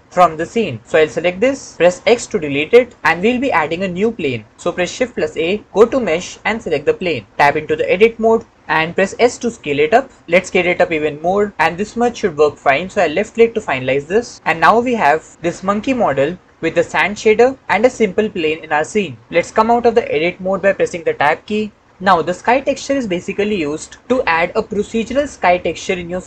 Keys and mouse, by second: 1.9 x, 4.9 shift+a, 9.6 s, 14.1 click, 15.3-16.4 drag, 21.3 Tab.